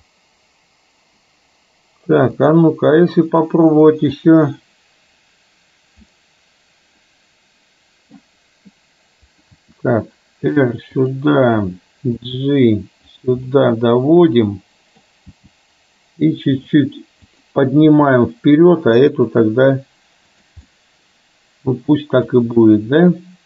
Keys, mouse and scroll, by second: 4.1 click, 6.1-8.2 middle drag, 9.6 r, 12.2 g, 13.5-15.2 middle drag, 15.3 g, 17.5 click, 17.8 g, 20.8-22.3 middle drag.